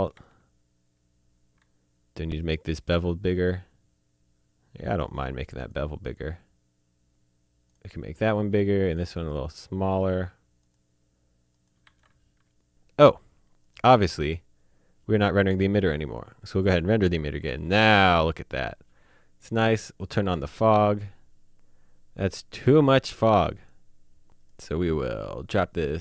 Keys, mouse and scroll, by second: 0.1 z, 1.5 z, 2.9 click, 5.0 click, 6.2 click, 7.7 click, 11.8 z, 13.6 click, 16.0 click, 19.9 click, 22.5 click, 23.5 click, 24.4 click.